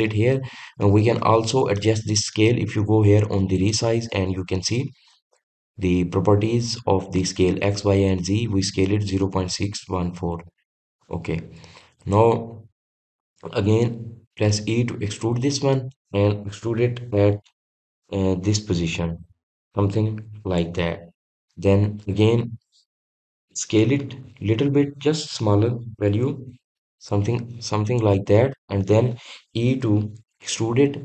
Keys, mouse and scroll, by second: 3.5-6.5 drag.